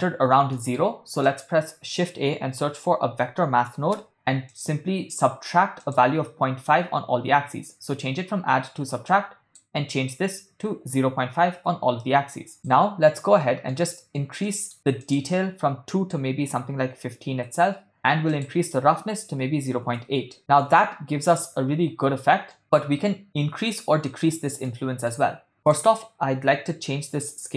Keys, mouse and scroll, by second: 0.6 middle click, 1.2 shift+a, 5.9-8.3 drag, 9.1-11.6 shift+drag, 12.5 click, 13.4 ctrl+middle click, 13.9 middle click, 14.5 ctrl+middle click, 15.0-17.6 drag, 18.3-20.1 drag, 21.0-21.8 shift+middle drag, 23.1 shift+middle click, 24.7-25.4 shift+middle drag, 26.2 click.